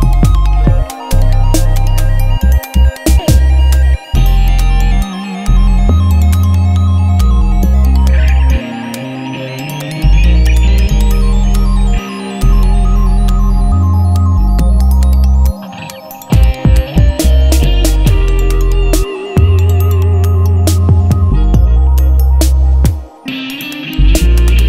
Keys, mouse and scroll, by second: 2.8 click, 6.8 click, 8.7-9.1 alt+scroll up 1, 9.6 alt+scroll up 1, 12.3 alt+scroll up 1, 12.4 click, 17.2 click.